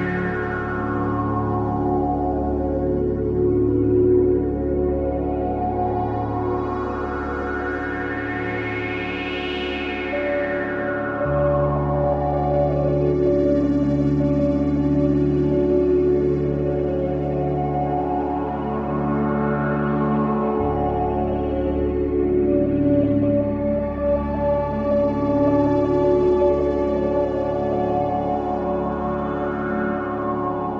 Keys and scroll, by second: 3.9 ], 5.7 ], 8.3 4, 9.9 3, 23.2 3, 30.0 4.